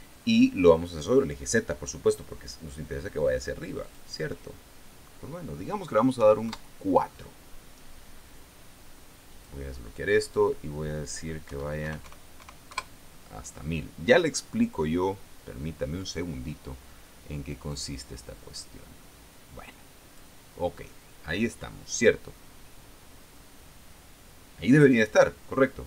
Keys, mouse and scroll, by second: 4.3 click, 6.7 KP_4, 7.0 KP_Enter, 9.8 click, 10.7 click, 12.0 KP_1, 12.3 KP_0, 13.2 KP_Enter, 18.3-20.9 drag.